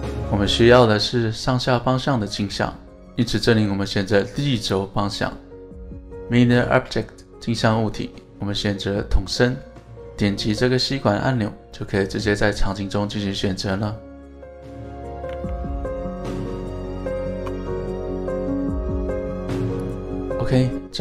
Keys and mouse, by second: 0.0 click, 0.6-1.7 middle drag, 3.5 click, 4.6 click, 14.6-15.0 middle drag, 15.3 alt+z, 15.7-16.1 middle drag, 16.7 middle drag, 17.4 KP_1, 18.9 click, 19.9 click.